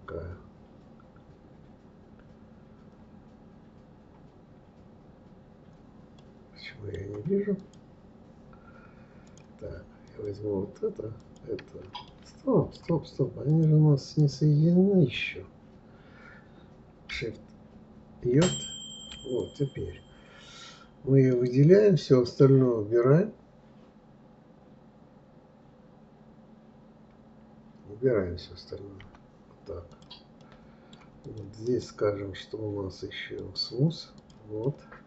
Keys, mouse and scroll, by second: 6.2-7.6 middle drag, 7.6 click, 9.3 drag, 10.0 click, 11.2 click, 12.0-13.5 middle drag, 13.5 shift+click, 14.2 shift+click, 18.4 ctrl+j, 19.3 click, 21.2 click, 29.0 KP_Divide, 29.9 click, 30.4-31.2 middle drag, 31.2 click, 31.7 right click, 34.2 click, 34.6-35.0 middle drag.